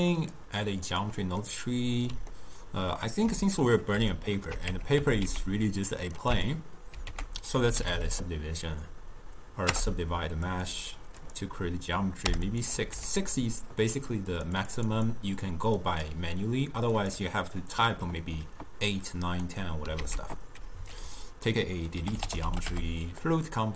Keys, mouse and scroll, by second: 0.3-1.5 drag, 1.5-4.7 middle drag, 4.7 Tab, 5.0 s, 6.4 Tab, 12.5-23.6 drag.